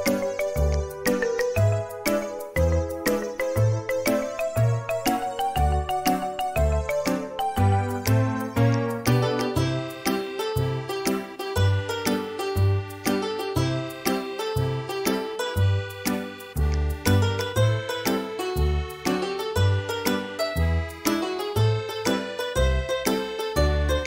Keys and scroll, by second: 2.5 2, 3.5 2, 5.6 b, 20.1 space.